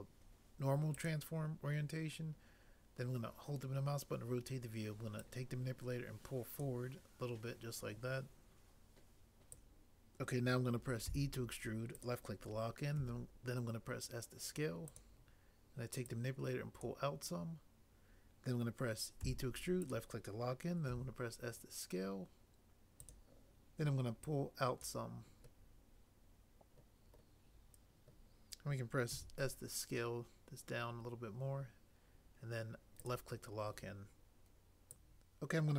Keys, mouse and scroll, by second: 11.0 e, 13.0 s, 19.1 e, 20.9 s, 29.1 s.